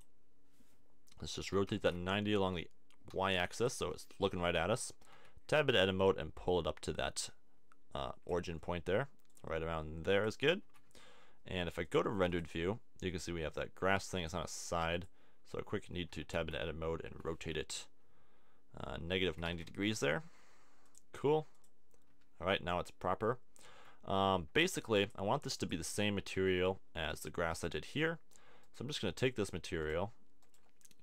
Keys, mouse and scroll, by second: 1.4 r, 5.1 Tab, 10.7 a, 11.0 Tab, 11.8 click, 16.1 Tab, 16.4 a, 17.1 r, 21.0 click, 21.6 click, 23.8 Tab, 24.7 Tab, 25.1 click, 26.3 Tab, 27.4-28.6 drag.